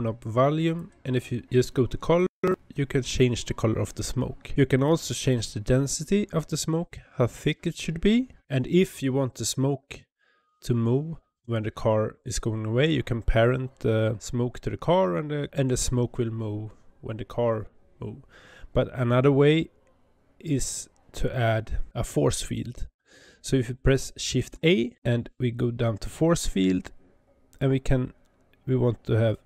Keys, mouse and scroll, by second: 5.3-8.2 drag, 21.9 click.